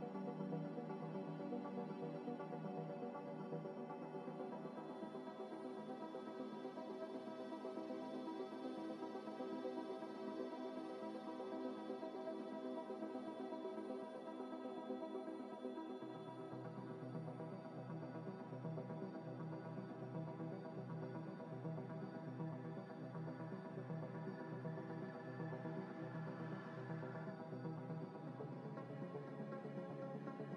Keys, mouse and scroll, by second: 2.8 double click, 3.5-5.6 scroll up 1, 10.8 middle click, 13.0 ctrl+z, 14.3-14.6 scroll down 1, 14.8 middle click, 15.4 right click, 16.4 z, 16.8 middle click, 17.2 z, 17.5 middle click, 18.1 right click, 18.9 middle click, 20.5 right click, 21.7 middle click, 25.1 double click, 26.9 middle click, 26.9 scroll down 1, 27.1 middle click, 27.4 z, 27.7 scroll down 1, 27.9 middle click, 28.4 scroll up 1, 28.9 scroll up 1, 29.3 middle click.